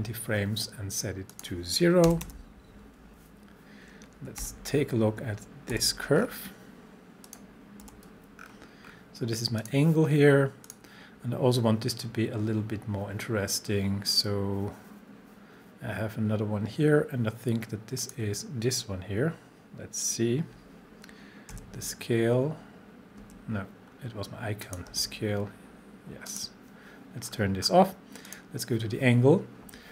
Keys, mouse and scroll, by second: 1.3 click, 2.1 0, 4.4 u, 6.2-7.3 scroll down 1, 7.3 click, 7.8 u, 8.4-8.9 scroll down 1, 9.6 click, 18.0 click, 21.5 s, 23.9-24.6 scroll up 1, 24.6 click, 24.9 s, 26.3 click, 27.3-28.3 scroll down 1, 28.3 click.